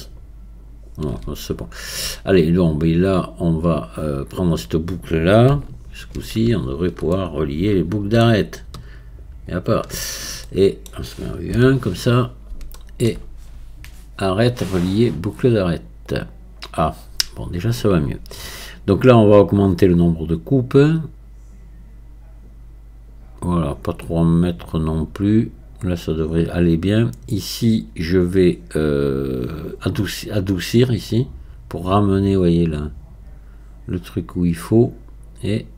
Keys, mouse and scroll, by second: 1.5 scroll up 4, 3.7-7.2 drag, 7.2-9.5 middle drag, 9.5 alt+shift+click, 10.1-10.5 scroll down 3, 10.5-11.5 middle drag, 11.5 KP_1, 12.4-12.8 scroll up 2, 12.8-14.3 shift+middle drag, 14.3-17.3 drag, 20.3-35.7 drag.